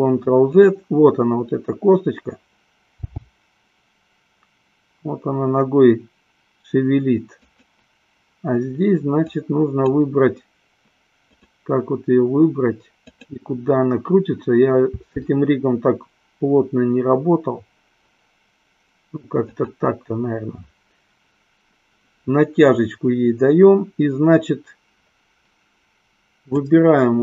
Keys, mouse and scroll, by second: 2.9 g, 9.3 click, 15.2 r, 26.4-27.2 drag.